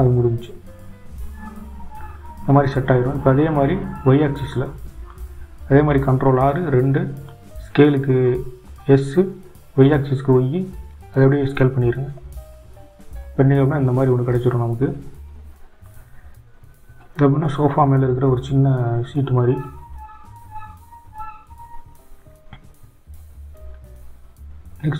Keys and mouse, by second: 4.6 click, 5.8 click, 6.9 ctrl+r, 22.9-24.9 drag.